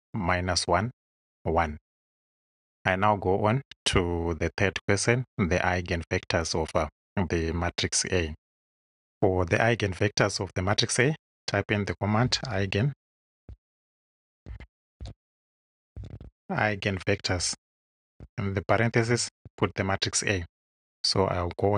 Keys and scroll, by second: 12.2-16.6 typing, 18.1 shift+9, 19.4 shift+a.